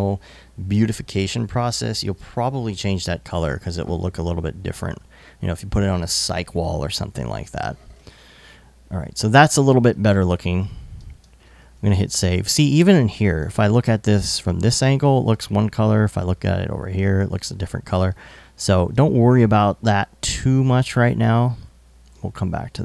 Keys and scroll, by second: 10.8 alt+super+s.